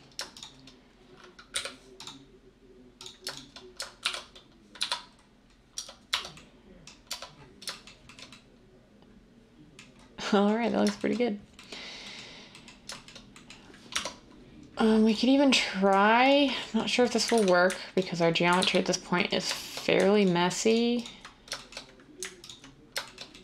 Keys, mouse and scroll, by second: 1.5 m, 4.0-5.8 typing, 13.9 Tab, 17.4 ctrl+z, 18.6 ctrl+z.